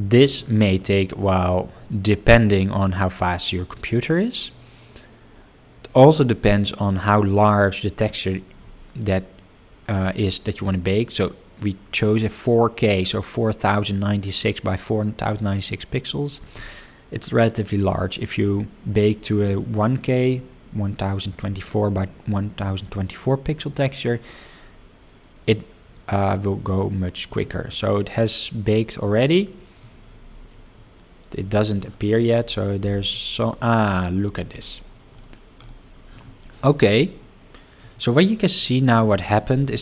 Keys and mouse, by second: 29.8-31.8 drag, 33.0 click, 37.8 click, 38.6-39.1 middle drag, 39.3 shift+middle drag.